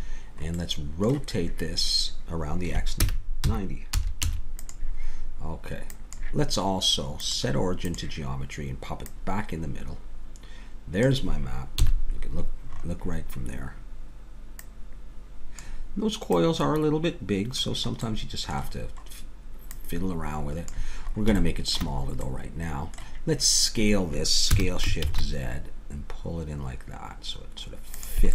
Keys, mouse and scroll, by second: 0.6-3.0 middle drag, 3.0 r, 6.0 click, 10.6 click, 11.8 KP_7, 14.6 click, 18.0 middle click, 19.7-21.6 drag, 21.6-24.5 middle drag, 24.5 s.